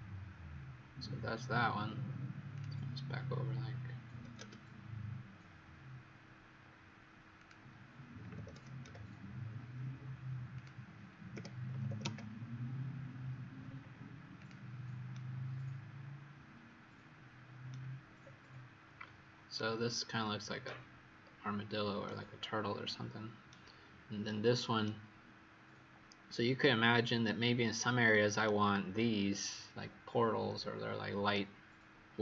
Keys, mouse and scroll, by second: 1.0-2.5 scroll down 6, 2.5 click, 4.0 KP_6, 4.1 KP_0, 4.3 KP_Enter, 7.3 click, 8.2 KP_6, 8.8 KP_Enter, 8.8 KP_0, 10.5 click, 11.3 KP_Subtract, 11.6 KP_3, 11.8 KP_0, 13.5-14.3 scroll up 6, 14.3 click, 15.0 right click, 18.1-18.9 scroll up 4, 18.9-19.5 scroll down 1, 21.1-21.9 scroll down 2, 21.9 right click.